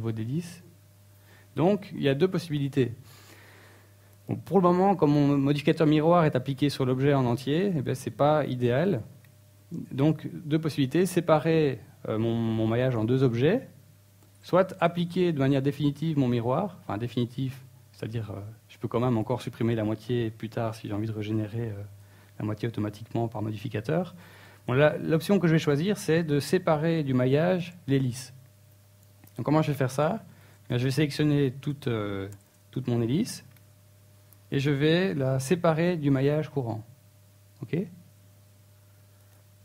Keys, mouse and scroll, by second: 1.8 click, 3.4-4.7 scroll down 3, 4.7-5.1 scroll up 3, 5.2 Tab, 6.3 Tab, 6.6-6.9 scroll down 2, 22.1 Tab, 22.3 Tab, 22.7 Tab, 23.2 right click, 27.1-27.6 scroll up 4, 27.6 shift+middle click, 28.1-28.7 scroll up 2, 28.7 shift+middle click, 29.7 ctrl+l, 30.7-31.3 scroll down 4, 31.3-31.7 scroll up 1, 35.6 p, 37.5 Tab, 38.3 right click, 38.7-39.1 scroll down 4.